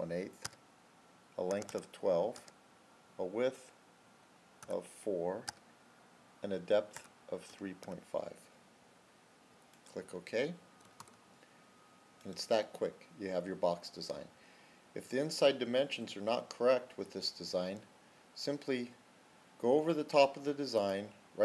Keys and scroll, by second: 0.3 Tab, 1.4 typing, 2.2 Tab, 4.3-5.0 typing, 5.4 Tab, 6.6-10.9 typing.